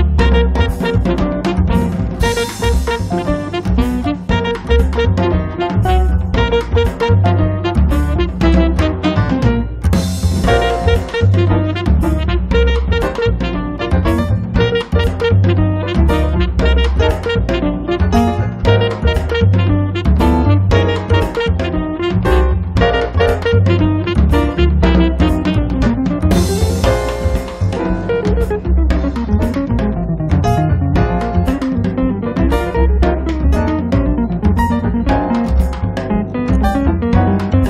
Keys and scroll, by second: 17.2 space, 28.7 Escape, 37.4 f.